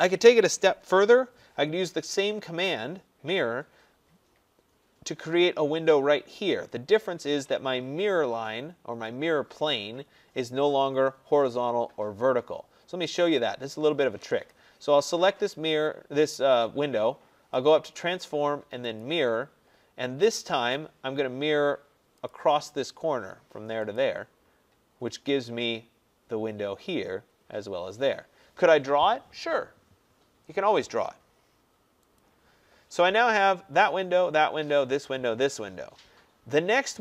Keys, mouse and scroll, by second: 14.6 click, 17.8 click, 23.9 click, 32.2 click, 32.6 middle click, 32.7-35.6 scroll, 36.0-36.7 scroll, 36.7 scroll.